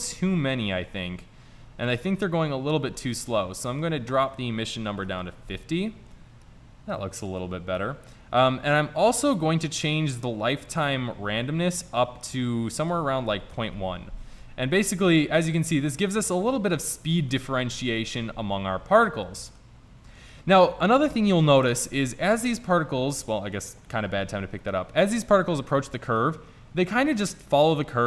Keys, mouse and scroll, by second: 0.1-0.5 middle drag, 4.2 click, 6.4 middle click, 10.2-12.1 drag, 12.9 click, 17.4 drag, 20.7-21.5 middle drag, 21.5 click, 23.3-24.1 middle drag, 24.9-26.1 middle drag.